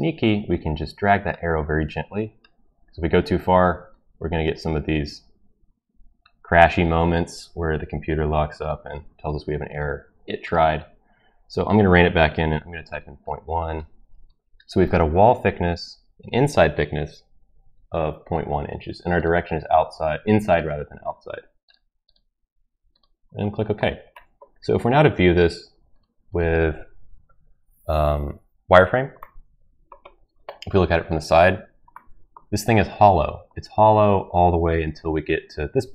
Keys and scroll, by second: 12.3-13.0 typing.